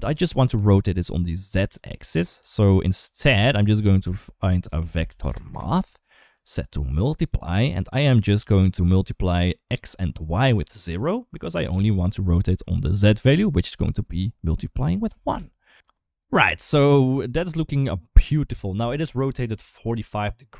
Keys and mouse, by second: 0.8 click, 1.0 click, 1.9 click, 2.2 g, 3.1 g, 3.8 shift+a, 6.4 click, 7.9 click, 11.5-15.1 drag, 15.6 ctrl+z, 16.9 ctrl+s, 18.7 shift+middle drag.